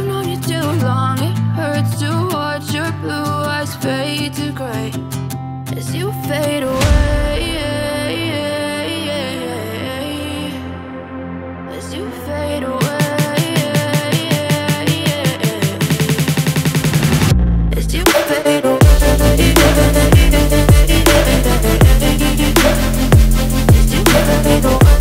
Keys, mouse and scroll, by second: 1.3 shift+a, 3.5 g, 7.3 s, 9.4-10.7 right drag, 10.7 ctrl+a, 11.7 Tab, 13.4 1, 13.8-16.1 right drag, 16.1-19.4 drag, 19.4 Tab, 20.8 Tab, 23.1 click, 24.7-25.0 drag.